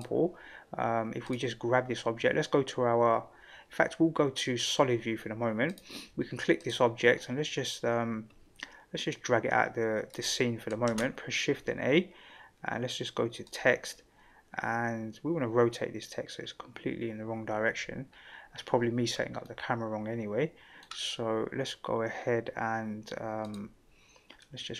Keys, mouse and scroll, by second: 1.2 click, 4.6 click, 5.7 click, 6.6 click, 9.1-10.1 drag, 10.8 shift+a, 19.4-20.8 middle drag, 23.4 click, 24.4-24.7 middle drag.